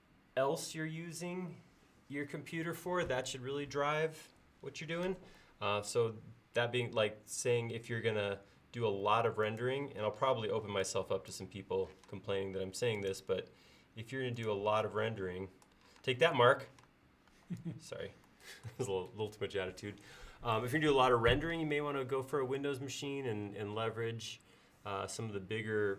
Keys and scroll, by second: 10.3 space, 12.0 m, 16.1 space, 16.8 m.